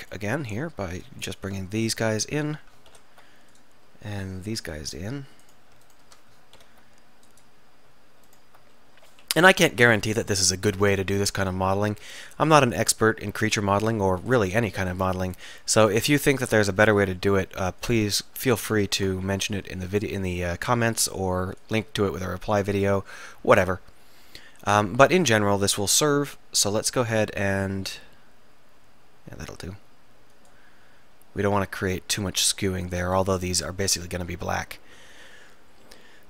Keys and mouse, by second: 3.0 alt+m, 6.2 click, 6.7 alt+m, 8.8-10.0 drag, 9.6 KP_1, 9.8 KP_3, 10.8 e, 13.4 r, 16.6-18.2 drag, 17.0 r, 19.3 r, 20.0-21.0 drag, 21.0 s, 25.2 f, 26.3 r, 31.5-32.8 drag.